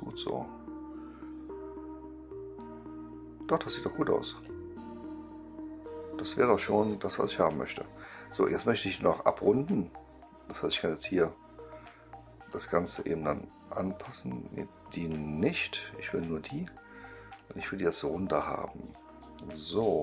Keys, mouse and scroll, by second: 4.3-6.8 right drag, 8.8 click, 10.6 click, 12.4-12.9 drag, 15.0 click, 16.3-19.0 drag, 19.5-20.0 right drag.